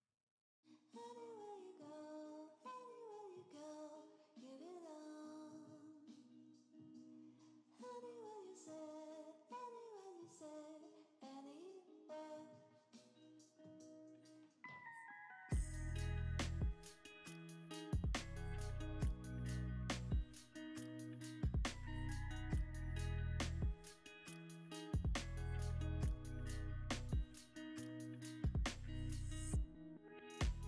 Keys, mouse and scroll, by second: 4.4 g, 4.5 z, 7.8 scroll, 7.8 scroll up 1, 8.2 middle click, 9.8 scroll up 1, 10.0 middle click, 18.5-20.6 scroll down 2, 20.6-22.5 scroll down 1, 22.5-24.6 scroll down 1, 27.2-28.7 scroll up 2, 28.7-30.5 scroll up 1, 30.5-30.6 scroll up 1.